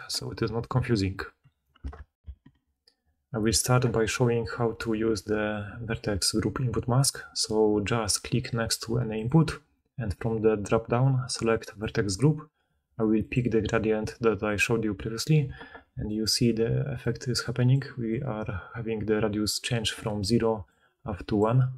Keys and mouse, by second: 2.2 ctrl+alt+Insert, 2.2-15.8 ctrl+alt+right drag, 16.5 d, 16.8 d, 16.9-17.8 d, 19.1 click, 19.1 middle click, 19.1 right click, 20.1 d, 20.5-21.7 drag, 20.5-21.7 middle drag, 20.5-21.7 right drag, 20.5 d, 20.7 d, 21.3 d.